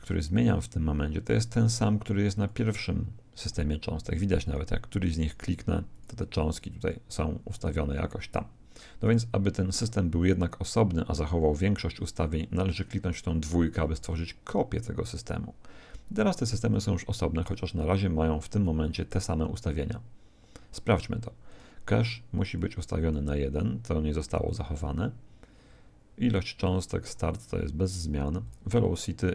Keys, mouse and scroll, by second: 2.3 click, 4.4-10.8 drag, 13.8 click, 16.7-26.2 drag, 28.4-29.3 drag.